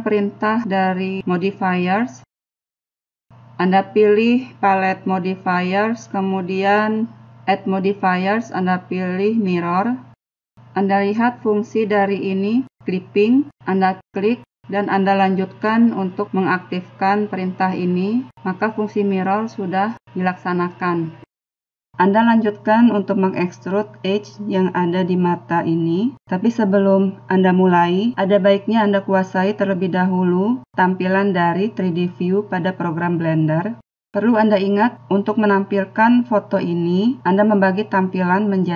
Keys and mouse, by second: 6.8-8.6 drag, 17.6 click, 17.6-19.6 middle drag, 19.6 click.